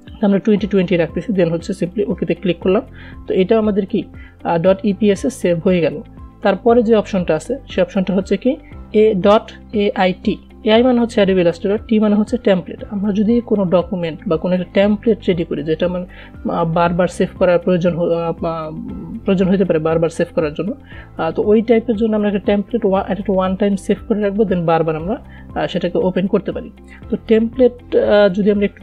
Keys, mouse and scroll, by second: 2.4 click, 7.8 click.